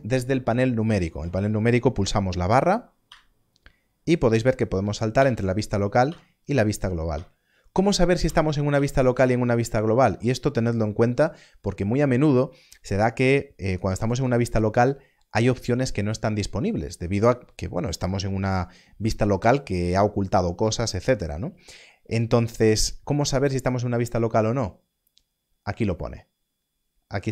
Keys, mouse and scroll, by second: 3.0 click, 5.1 KP_Divide, 6.0 KP_Divide, 7.1 /, 8.2 /, 8.7 KP_Divide.